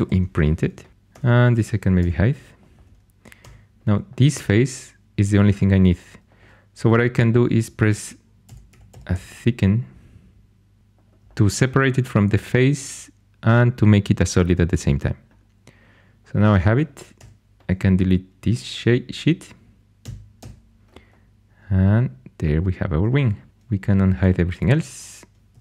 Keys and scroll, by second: 0.0 Caps_Lock, 1.0 2, 1.9 h, 3.3 3, 8.1-9.5 typing, 17.1 4, 20.3 x, 24.5 alt+h, 25.4 2.